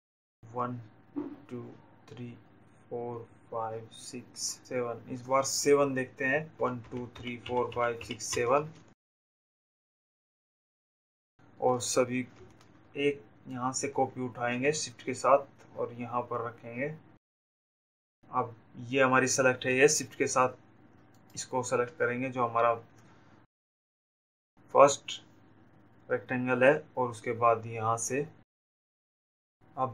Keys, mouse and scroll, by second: 7.1 ctrl+j, 14.3 click, 22.7 click, 27.6 click.